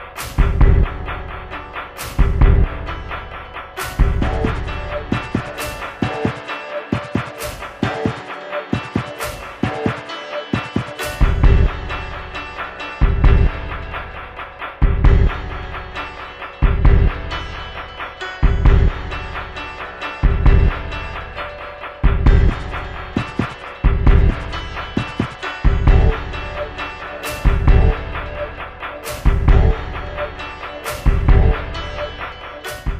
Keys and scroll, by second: 0.0 Right.